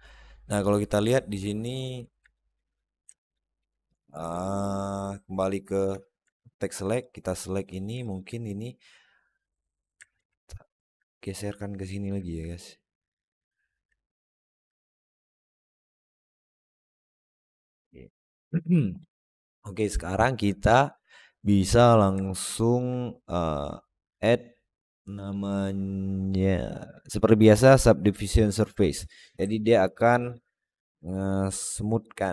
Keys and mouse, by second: 1.7 Tab, 2.3 alt+middle click, 3.0 alt+shift+middle click, 3.4 alt+z, 3.7 alt+middle click, 5.7 1, 6.2 alt+middle click, 7.0 click, 7.9 alt+middle click, 8.6-9.8 drag, 10.0 alt+z, 10.3 alt+middle click, 11.2 click, 13.9-14.4 alt+middle drag, 15.0 click, 15.9 Tab, 16.2 alt+z, 16.4-17.2 middle drag, 17.3 alt+z, 17.6-17.9 alt+middle drag, 20.7 click, 22.1-22.6 alt+middle drag, 25.2-28.7 drag, 29.4-29.9 alt+middle drag, 30.0 alt+middle drag.